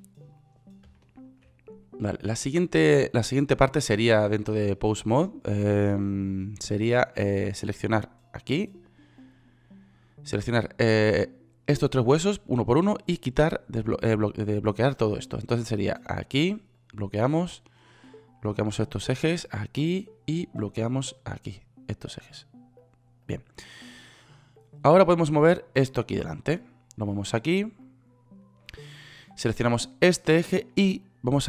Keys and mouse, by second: 8.1-11.6 right drag, 17.9-27.8 right drag.